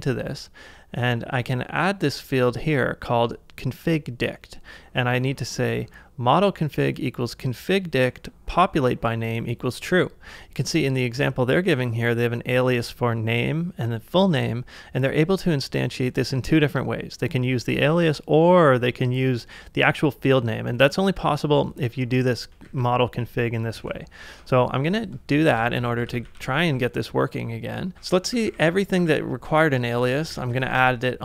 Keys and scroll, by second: 22.7 super+c, 23.8 super+Tab, 25.6 ctrl+a, 26.1 ctrl+a, 27.7-28.8 typing, 30.0 typing, 30.6 ctrl+c.